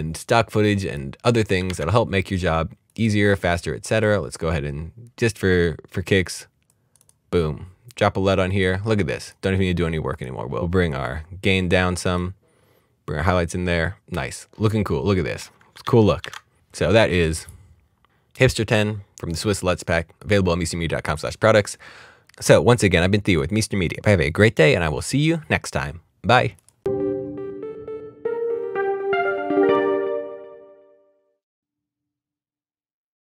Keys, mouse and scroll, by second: 4.9 click, 6.7 click, 15.7 click, 15.8 alt+d, 16.2 alt+d, 17.0 click, 20.2 click, 26.6 click.